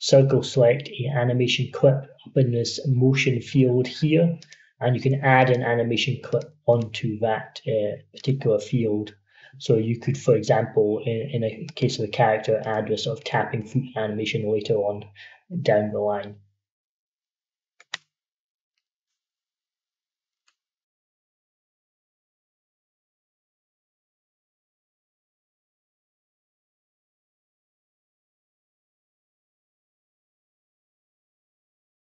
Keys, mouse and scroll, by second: 4.2 click, 11.5 click, 17.8 F14, 20.3 middle click.